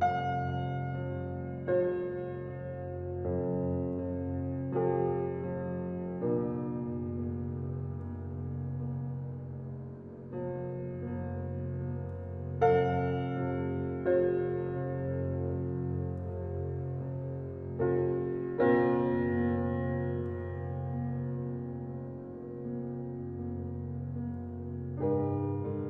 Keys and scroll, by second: 3.3 alt+Delete, 9.5 ctrl+d, 22.0 ctrl+g.